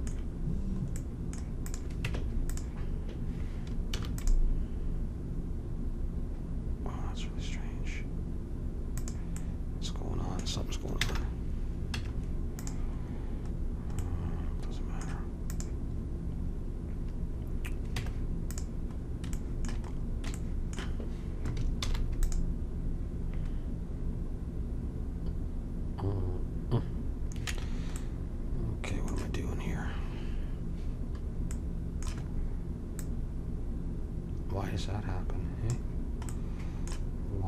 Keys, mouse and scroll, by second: 1.6-3.5 drag, 2.0 Tab, 3.9 ctrl+r, 11.0 ctrl+z, 11.9 Tab, 15.4-17.3 drag, 17.9 Tab, 18.6 Tab, 21.8 ctrl+r, 28.0-30.6 middle drag, 31.5-33.0 middle drag, 33.0-34.8 drag, 36.3 middle click.